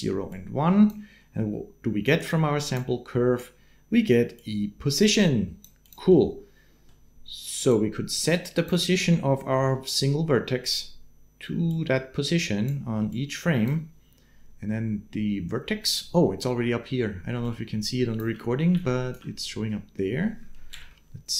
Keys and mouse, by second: 0.1-1.3 drag, 2.2 click, 4.2-5.7 drag, 5.9 click, 7.5-8.5 drag, 11.5 click, 12.9 click, 17.1 d, 17.2 click, 18.0 d, 18.0 d, 18.5 d, 18.6 click, 20.5 shift+Left.